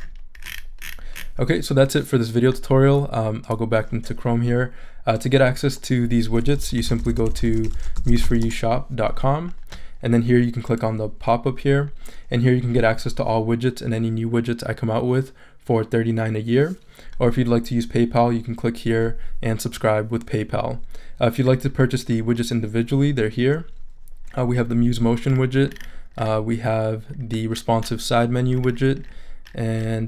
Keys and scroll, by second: 6.3-8.7 typing.